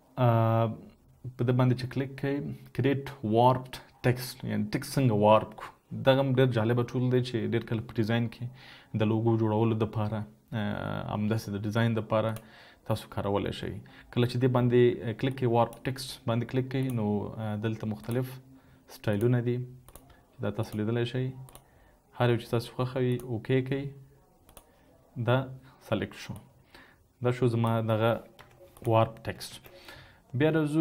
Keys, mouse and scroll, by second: 29.3 typing.